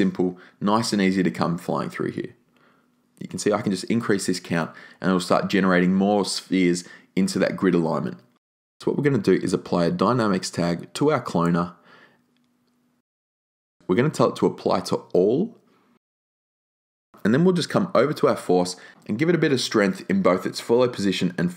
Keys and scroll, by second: 2.4 2, 2.6 Tab, 2.9 2, 3.1 Tab, 3.3 2, 3.5 Tab, 5.9 3, 6.2 Tab, 20.7-21.5 typing.